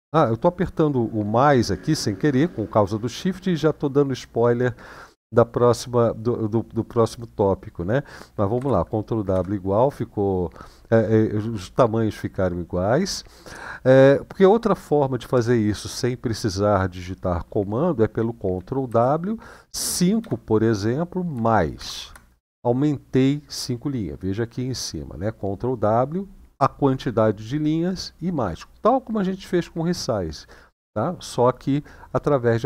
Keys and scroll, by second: 8.3 ctrl+w, 9.0 =, 18.6 ctrl+w, 20.0 5, 24.2 typing.